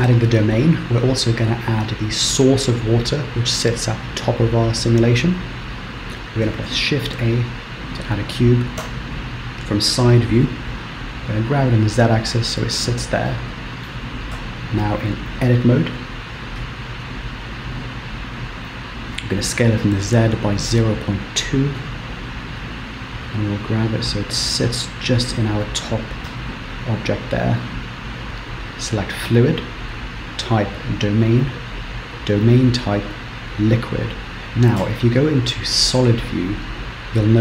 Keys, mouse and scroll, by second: 6.5 shift+a, 8.9 KP_3, 10.2 g, 12.4-13.0 scroll up 3, 13.2 shift+middle click, 14.5 q, 17.2 Tab, 19.4 s, 22.0 Tab, 22.6 g, 25.0 middle click, 26.2 z, 28.2 click, 28.7 click, 29.7 click, 31.4 click, 34.4 click, 34.4 KP_0, 35.0 z.